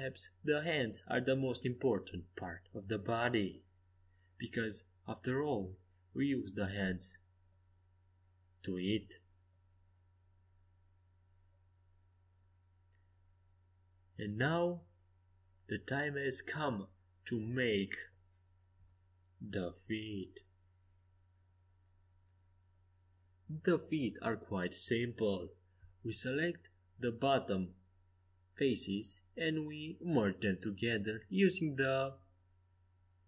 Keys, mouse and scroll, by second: 0.2 ctrl+z, 0.8 ctrl+z, 1.7 a, 3.0-6.9 middle drag, 9.3 KP_5, 9.6 KP_1, 10.0 KP_3, 10.5 KP_5, 24.6-33.0 right drag, 27.9 f, 29.9 f.